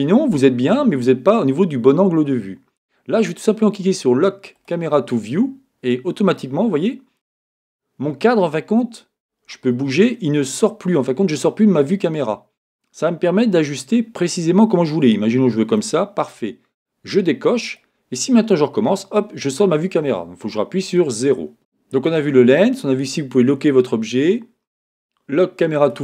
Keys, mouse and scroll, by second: 4.5-6.3 drag, 6.4-8.0 middle drag, 9.7-11.6 middle drag, 17.6-19.4 drag, 18.5-20.8 middle drag, 20.8 KP_0, 25.8-26.0 drag.